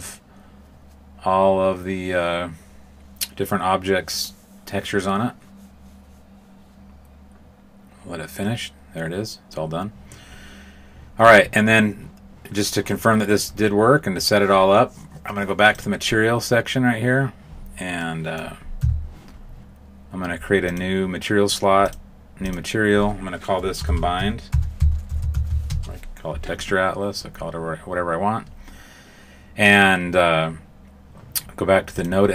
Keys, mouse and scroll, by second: 15.7 click, 17.9 middle click, 18.7 a, 20.6 click, 21.8 click, 22.4 click, 31.9 click.